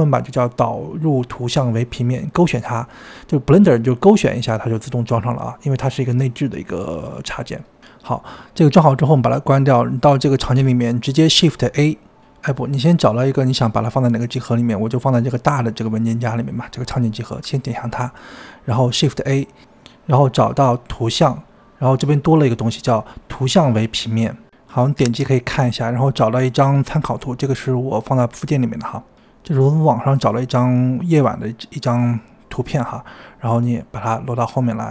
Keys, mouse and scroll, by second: 9.4-11.2 drag, 11.2-11.8 scroll down 6, 12.4-14.6 scroll up 9, 14.9-20.0 drag, 20.0 shift+a, 31.0 g, 31.8 s, 32.7-33.6 middle drag, 33.6 KP_1, 34.1 shift+middle click, 34.3-34.9 drag.